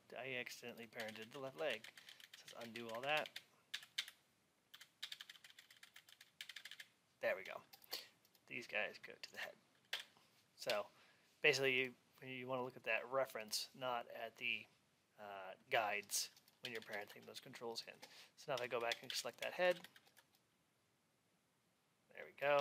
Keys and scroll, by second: 16.5 alt+x.